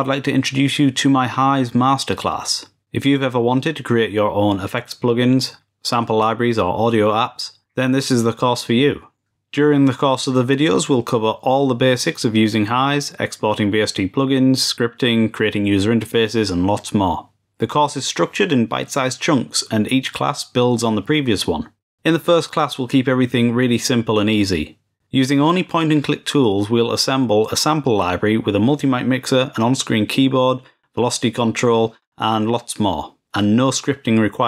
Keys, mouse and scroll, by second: 0.3 click, 0.4 click, 1.5 click, 2.2 click, 2.8 click, 3.6 click, 3.7 click, 4.2 click, 4.5 ctrl+a, 6.0 click, 6.3 click, 6.7 right click, 7.9 click, 9.0-9.7 drag, 11.5 click, 13.5 click, 14.5 click, 18.0 click, 21.1 click, 22.7 click, 23.2 click, 23.4 click, 24.5 click, 24.6 click, 25.2 click, 25.7 ctrl+s, 26.2 click, 26.4 drag, 26.8-27.1 drag, 27.2 click, 27.6 click, 27.9 click, 28.8 drag, 29.1 click, 30.2 click, 30.4 click, 30.5 click, 30.6 click, 30.7 click, 31.2 click, 31.6 click, 32.2 click, 32.7 click, 32.9 click, 33.2 click.